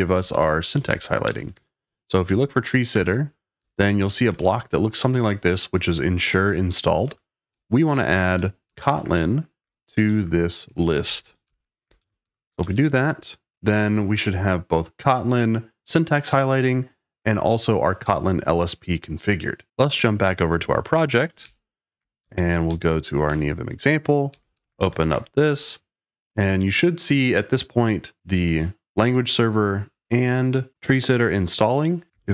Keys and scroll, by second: 0.0-4.2 typing, 6.9 Escape, 7.2-13.2 typing, 21.4 super+k, 22.1 Down, 22.6 Down, 23.2 Return, 24.0-25.5 typing, 31.9-32.3 typing.